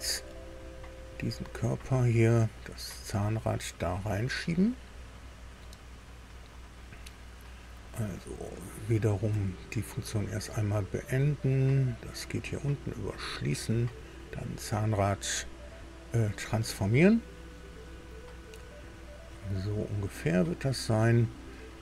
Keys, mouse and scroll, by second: 0.5 scroll down 2, 1.1 scroll down 2, 3.0 click, 6.4 right click, 9.3 Escape, 10.5 click, 12.1 click, 13.0 click, 14.5 right click, 16.2 click, 17.5-21.6 drag.